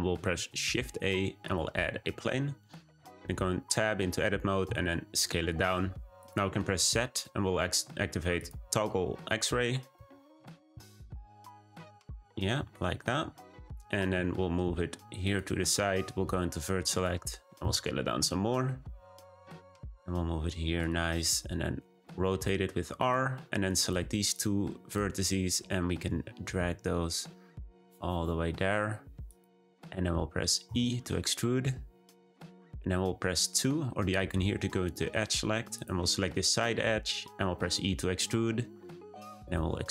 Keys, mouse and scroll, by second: 0.3 shift+a, 1.9 Tab, 2.1 a, 4.6 s, 6.7 z, 9.9 s, 10.7-12.5 middle drag, 12.5 `, 14.1 g, 16.8 click, 17.6 s, 19.7 g, 22.0 r, 23.6 click, 24.3 shift+click, 26.0 g, 30.6 e, 34.2-35.8 drag, 37.5 e, 39.5 e.